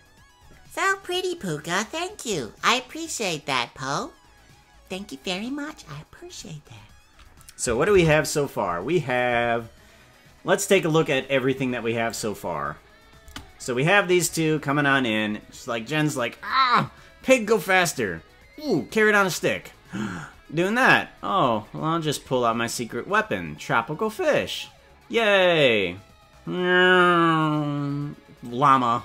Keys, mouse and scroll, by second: 9.7 ctrl+s, 10.7 click, 12.0 click, 13.3 space.